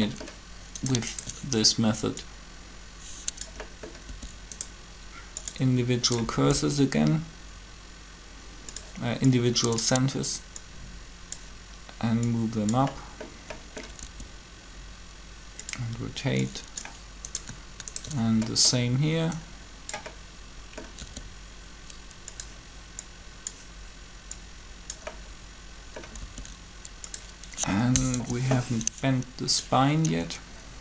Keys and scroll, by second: 4.1 r, 6.5 r, 14.0 r, 21.0 r, 26.2 r, 28.1 7.